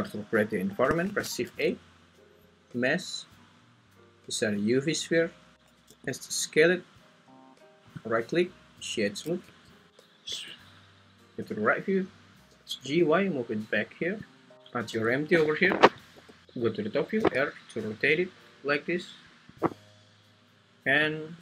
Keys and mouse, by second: 1.1 shift+a, 5.9 s, 7.3 click, 8.3 right click, 9.4 `, 9.9 `, 10.4 `, 12.5 g, 12.8 y, 14.9 g, 15.5 Escape, 16.1 r, 17.2 `, 19.6 click, 21.0 `.